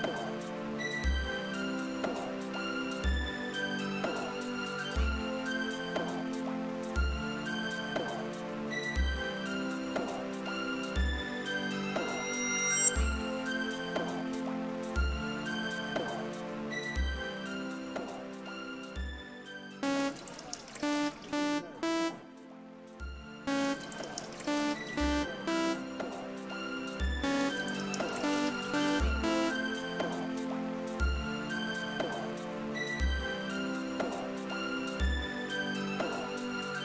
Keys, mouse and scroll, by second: 0.8 click, 2.4 click, 3.5 click, 4.5 click, 6.6 click, 8.4 right click, 12.0 click, 14.7 click, 15.8 click, 17.5 click, 17.9 click, 19.8 space, 22.8 space, 26.7 space, 29.7 space, 33.9 click, 35.0-36.6 drag.